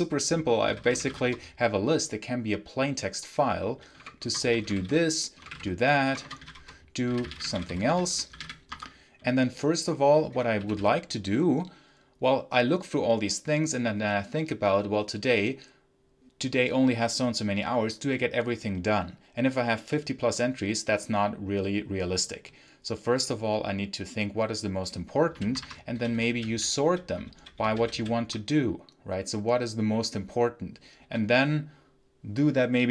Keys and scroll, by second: 0.3-1.4 typing, 3.8-8.8 typing, 10.2 0, 10.5 g, 25.6-26.7 typing, 27.2 ctrl+k, 27.5 ctrl+j, 27.6 ctrl+k, 27.8 ctrl+j, 30.9 k.